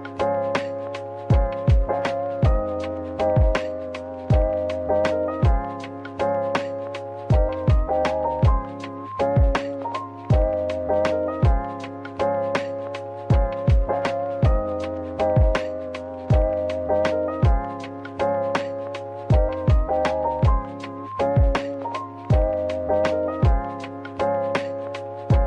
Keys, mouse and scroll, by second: 2.1-3.5 typing, 6.6 scroll down 1, 7.2-9.2 typing, 9.9 right click, 10.4-11.4 typing, 13.3 typing, 14.9 right click, 15.2 middle click, 16.0 typing, 20.9-21.6 typing, 21.8 Return, 23.6 double click.